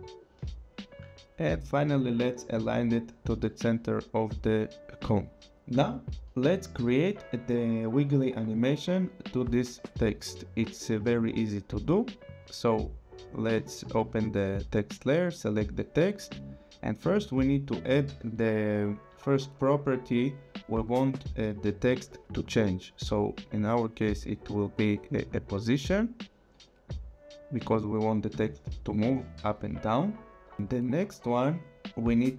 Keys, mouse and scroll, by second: 1.5 click, 10.3 click, 12.8 click, 15.2 click, 16.5 click, 25.2 click, 27.6 click.